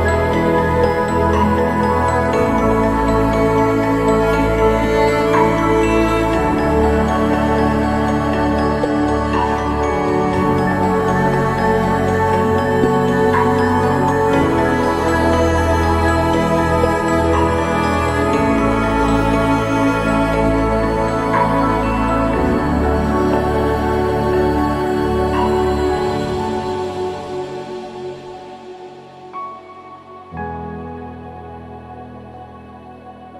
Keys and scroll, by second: 20.7 ctrl+=, 21.0 ctrl+=, 25.5 ctrl+=.